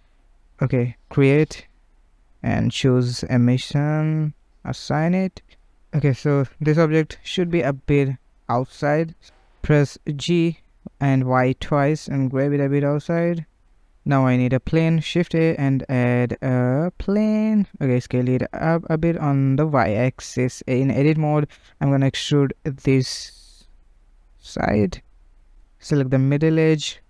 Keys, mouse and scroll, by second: 0.9-3.4 drag, 3.9 click, 5.6-7.8 middle drag, 7.8 Tab, 8.3 typing, 9.4 middle click, 9.8 g, 13.5-14.2 middle drag, 18.0 s, 19.4 Tab, 20.2 2, 20.3 click, 21.3 g, 22.6 e, 25.8 click, 26.1 typing, 26.4 middle click.